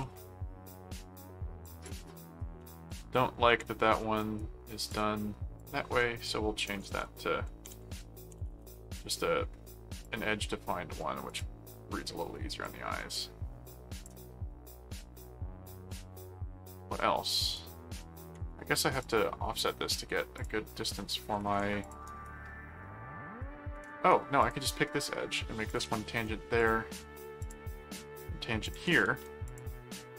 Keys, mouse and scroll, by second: 1.6 click, 2.9 click, 4.2 right click, 4.9 click, 5.6 click, 8.2-9.0 typing, 10.0 click, 11.3 click, 12.6-14.0 drag, 14.9 click, 17.4 right click, 19.0 click, 20.3 click, 21.8 click, 22.0 right click, 24.4 ctrl+click, 25.7 ctrl+alt+click, 26.1 ctrl+alt+a, 26.6 click, 27.4 ctrl+click, 28.6 ctrl+alt+click, 29.1 ctrl+alt+a, 29.4 click.